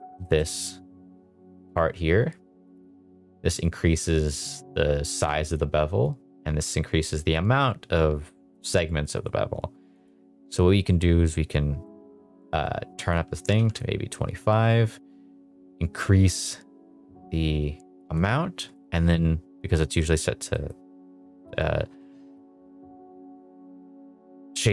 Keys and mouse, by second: 0.2 shift+middle drag, 2.7-5.5 drag, 6.1-8.5 drag, 9.1 right click, 10.9-11.8 middle drag, 12.9 click, 14.9-18.1 drag, 18.6-19.8 right drag, 20.5 middle drag.